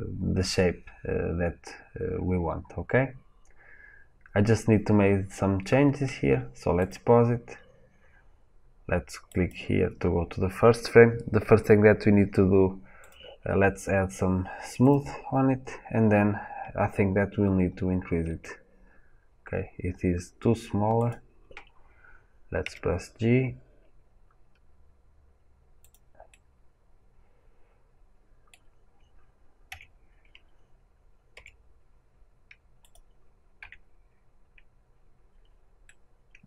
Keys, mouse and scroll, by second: 7.0-9.3 drag, 9.3-14.9 right drag, 14.9-21.0 drag, 18.3 s, 22.7 g, 25.8 click, 26.2-32.8 middle drag, 31.4 g, 32.8 click, 35.8-36.4 middle drag.